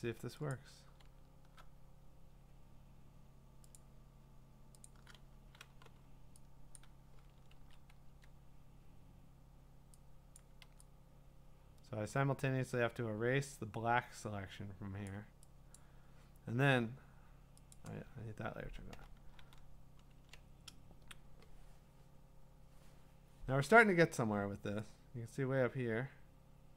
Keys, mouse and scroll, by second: 0.0 click, 0.5 click, 1.1-1.5 scroll, 1.9-3.8 scroll, 3.8 click, 4.9 click, 5.7 b, 6.8 click, 7.5 ctrl+z, 8.1 x, 10.4 click, 10.6 x, 15.0 click, 15.8 click, 17.7 click, 18.1-19.0 scroll, 19.4 ctrl+d.